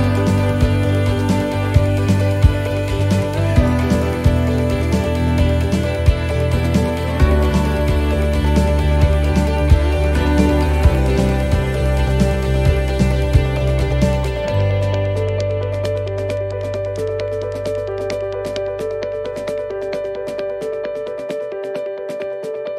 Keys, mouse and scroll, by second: 0.4 scroll down 1, 2.9 click, 8.7 click, 17.5 click, 21.2 click.